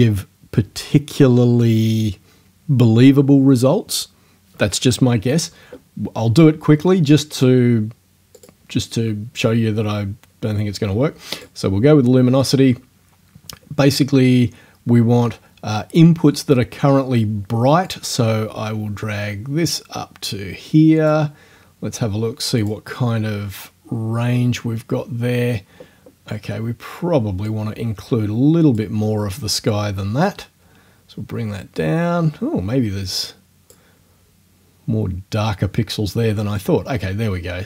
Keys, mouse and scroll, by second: 7.3 click, 8.4 click, 11.3 click, 17.9-21.3 drag, 22.6 click, 27.5-29.0 drag, 31.8-33.9 drag.